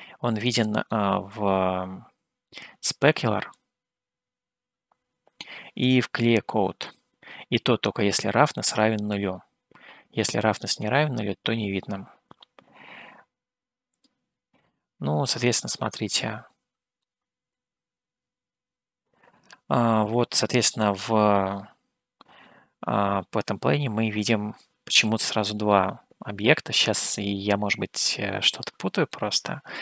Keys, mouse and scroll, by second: 1.0-2.7 middle drag, 3.7-6.2 drag, 14.1 click, 15.4-17.1 middle drag, 24.4-26.1 middle drag, 27.0 click, 28.6-29.5 scroll up 1, 29.5-29.8 middle drag.